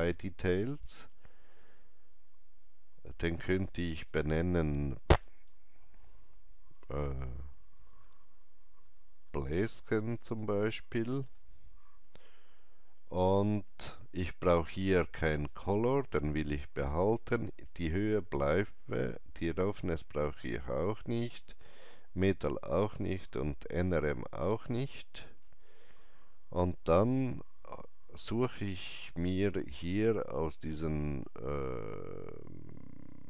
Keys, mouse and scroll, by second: 3.5 click, 4.2 click, 5.1 click, 5.3 click, 8.0-11.1 typing, 11.2 Return, 15.2 Return, 15.2 click, 19.4 Return, 19.4 click, 21.2 click, 24.4 scroll down 1, 25.2 scroll down 1, 28.4 click, 28.4 scroll down 1.